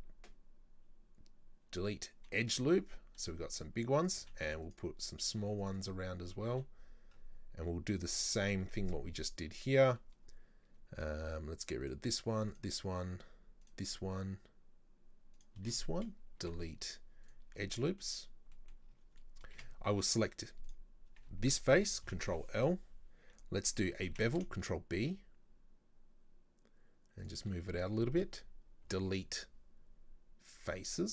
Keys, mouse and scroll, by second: 4.2 ctrl+r, 5.4 ctrl+r, 11.9 alt+right click, 12.6 alt+shift+right click, 13.7 alt+shift+right click, 15.4 alt+shift+right click, 16.4 Delete, 17.6 scroll down 2, 17.8 middle click, 18.3 scroll down 1, 18.6 middle click, 18.9-19.6 scroll up 3, 19.6 a, 20.7 right click, 22.1 ctrl+l, 23.5-24.1 scroll up 2, 24.1 ctrl+b, 28.9 Delete, 30.9-31.1 middle drag.